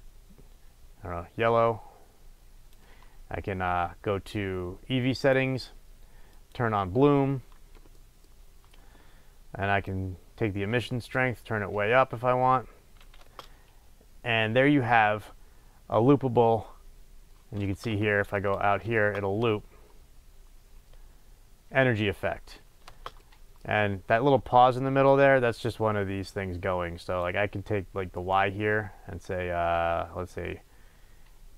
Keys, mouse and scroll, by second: 5.1 click, 6.3 click, 8.0-9.9 middle drag, 9.9-18.7 drag, 13.3 space, 17.6 space, 22.9 space, 23.2-25.1 middle drag, 25.1-28.2 drag, 28.2-31.5 right drag.